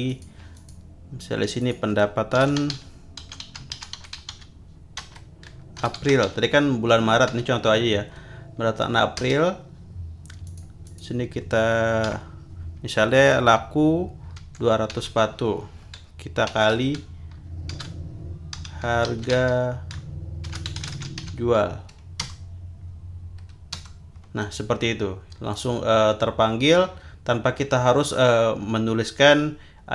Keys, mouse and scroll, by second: 0.1 click, 0.5 click, 1.6 click, 2.1-7.3 typing, 9.2 Return, 10.4 click, 10.9 click, 12.1 =, 14.4 2, 14.9 0, 16.5 shift+8, 17.7-21.7 typing, 22.2 Return, 23.7 Return, 25.5 click.